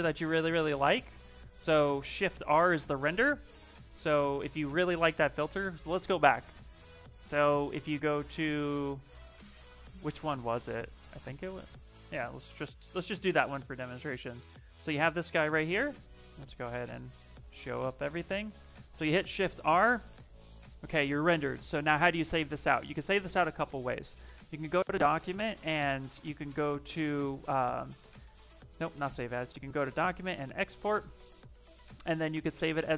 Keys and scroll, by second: 2.2 shift+r, 4.0 ,, 12.8 ,, 14.5 f, 15.1 f, 17.8 v, 18.6 shift+r.